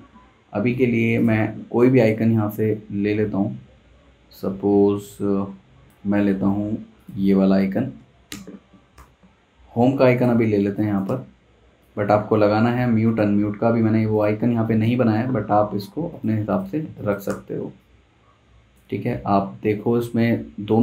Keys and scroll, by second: 7.7 super+c, 7.9 super+c, 8.3 super+Tab, 8.9 super+v, 10.3 z, 10.5 z, 11.0 v, 16.4-17.8 typing.